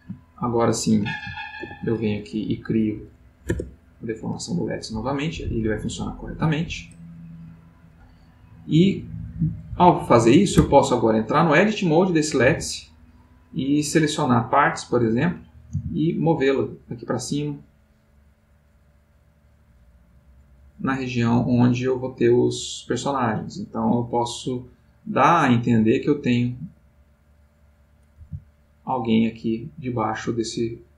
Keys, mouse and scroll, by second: 0.3 shift+click, 1.6 ctrl+p, 3.5 Return, 4.8-7.8 middle drag, 10.5 Tab, 11.3 click, 12.2-14.3 middle drag, 14.8 click, 15.7 g, 18.0-21.1 middle drag, 21.1 click, 21.8 g, 24.3-26.2 middle drag, 27.6-29.3 drag.